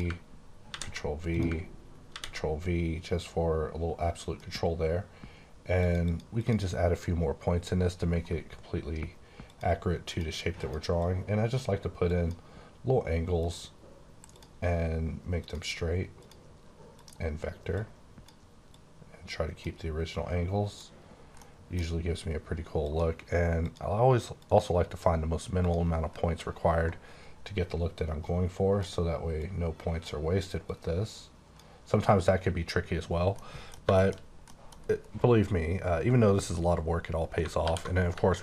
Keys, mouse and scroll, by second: 0.7 ctrl+v, 1.3 click, 2.1 ctrl+v, 5.8 click, 6.0 double click, 9.5 click, 10.0 click, 10.5 click, 10.9 click, 12.1 click, 13.3 click, 14.3 click, 15.3 click, 16.2 click, 16.9 click, 17.7 click, 19.0 click, 20.1 click, 21.3 middle click, 22.8 click, 23.5 click, 24.3 click, 25.6 click, 28.0 click, 29.7 click, 30.6 click, 33.3 middle click, 33.9 shift+middle click, 37.4 alt+Num_Lock, 37.6 alt+w.